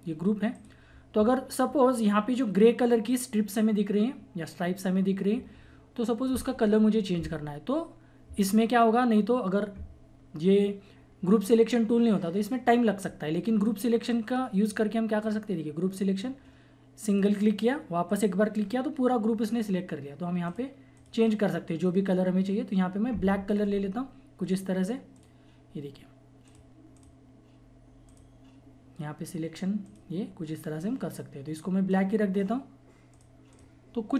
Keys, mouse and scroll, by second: 14.1 click, 20.4 click, 22.5-23.3 typing, 24.1 click, 32.0 typing.